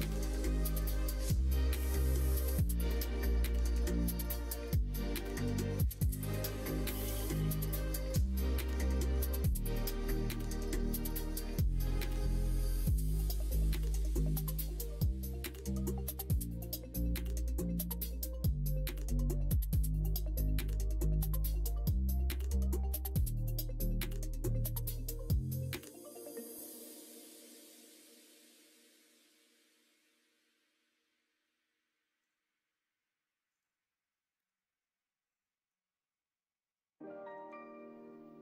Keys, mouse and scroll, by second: 0.8 middle click, 1.4 alt+z, 2.0 middle click, 4.0 middle click, 4.6 middle click, 5.3-6.8 drag, 8.0-10.5 drag, 12.5 click, 13.6 click, 13.7 click, 13.8 click, 15.6 click, 16.1 middle click, 16.7 middle click, 17.3 middle click, 17.7 Tab, 18.0 middle click, 18.5 alt+z, 18.7 middle click, 19.3 alt+z, 19.6 middle click, 21.3-29.6 drag, 32.2 click, 34.3-35.7 middle drag, 37.3 alt+z.